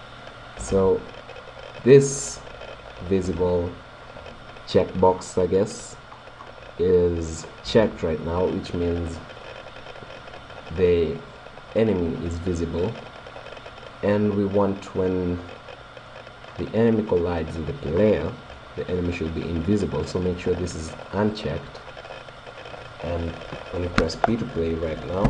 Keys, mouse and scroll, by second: 5.0-8.9 middle drag, 15.5-20.0 middle drag, 21.1-23.0 drag, 25.2 p.